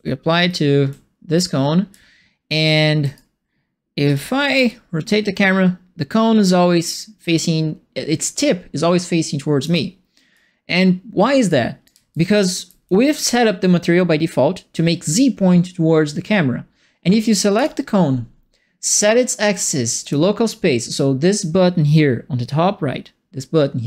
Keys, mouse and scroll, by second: 0.8 a, 1.9 d, 2.6 q, 4.0 f, 4.6-9.6 alt+drag, 10.3-11.4 right drag, 11.8-13.2 right drag, 11.9 d, 12.3 d, 12.8 s, 17.5 click, 20.0 click.